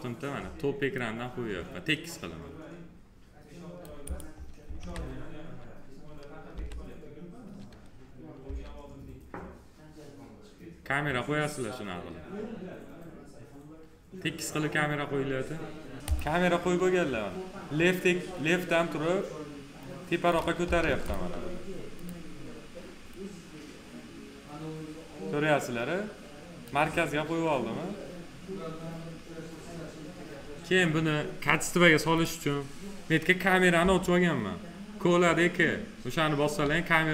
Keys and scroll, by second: 4.6 alt+w, 6.3 c, 8.2 s, 20.6 ctrl+z, 33.6 c.